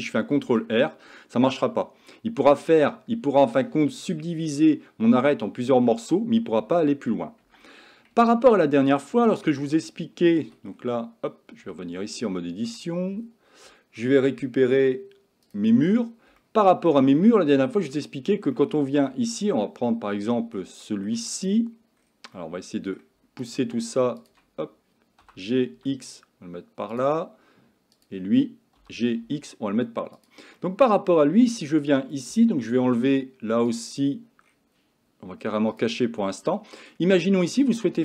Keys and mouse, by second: 0.4 ctrl+r, 11.7 Tab, 12.3-12.8 shift+middle drag, 15.5 click, 16.4-16.9 shift+middle drag, 17.2-17.9 shift+middle drag, 18.6 middle click, 19.4 shift+middle drag, 19.9-20.6 shift+middle drag, 20.9 shift+middle drag, 22.4-23.1 middle drag, 25.3 g, 28.8 g, 30.6-31.2 middle drag, 36.3-37.0 middle drag.